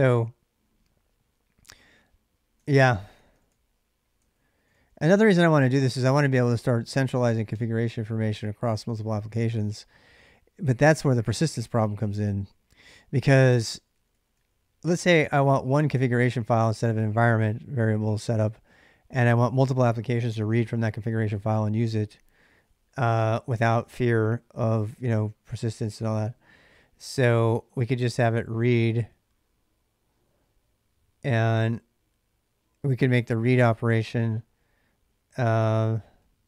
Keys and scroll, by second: 0.0-0.3 typing, 2.1-4.9 typing, 11.2 k, 11.5 k, 11.5 k, 13.2 k, 13.4 k, 13.7 k, 13.9 k, 27.0-28.0 typing, 36.0-36.4 typing.